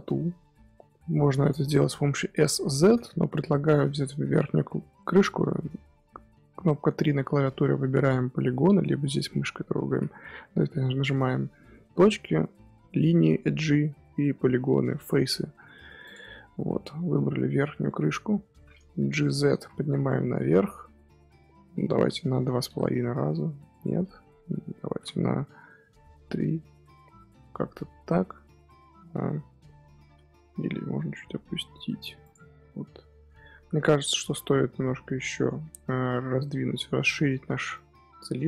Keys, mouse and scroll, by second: 3.3 middle click, 3.9 3, 4.9-7.9 middle drag, 10.8-12.2 scroll up 1, 15.3 middle click, 16.0 click, 16.4-17.9 middle drag, 17.9 KP_1, 19.1-20.3 shift+middle drag, 20.3 g, 24.7 g, 27.2-30.2 middle drag, 30.3 g, 33.6 a, 33.9 scroll up 1, 34.0-36.1 middle drag, 36.1 scroll down 4, 36.4-38.4 middle drag.